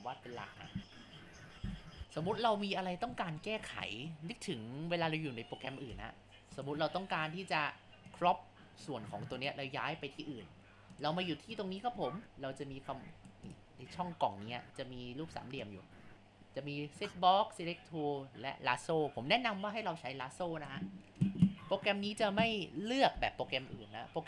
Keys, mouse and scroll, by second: 3.2-5.9 shift+middle drag, 5.9 Tab, 8.1 drag, 9.4 click, 10.9-18.7 drag, 21.9-23.6 shift+middle drag.